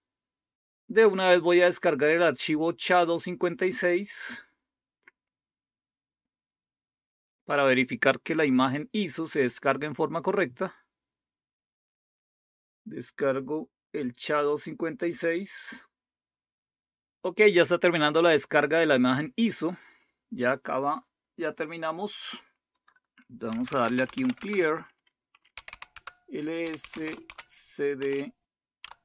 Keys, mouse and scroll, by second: 2.9 click, 14.8 click, 21.8 click, 22.7 click, 23.2-28.0 typing, 28.8 Tab.